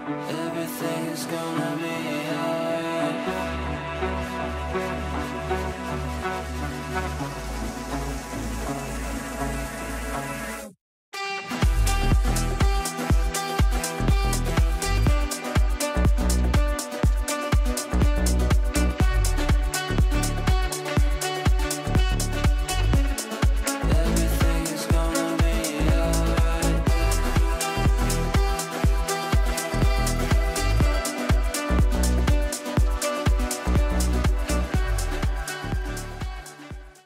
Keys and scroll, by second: 4.7 g, 8.4 ctrl+z, 34.1 shift+F2, 34.5 Escape.